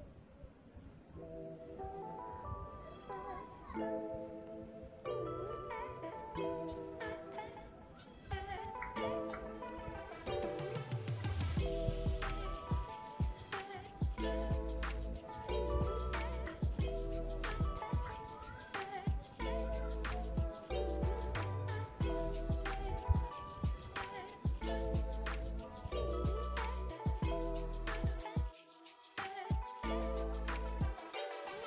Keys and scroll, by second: 3.6 ctrl+z, 10.4 Tab.